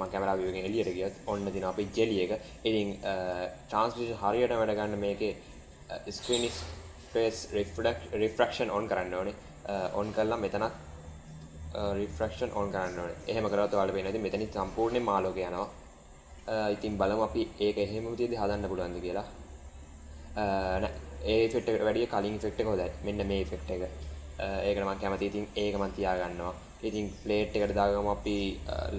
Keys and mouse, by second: 0.0 shift+middle click, 0.7-2.0 middle drag, 2.3 click, 8.4 click, 10.8 click, 12.1 drag, 12.7 click, 13.2 middle click, 15.6 click, 18.0-20.8 drag, 22.3 click, 23.1-24.5 middle drag, 24.9-25.4 middle drag, 27.6 click, 28.7 click.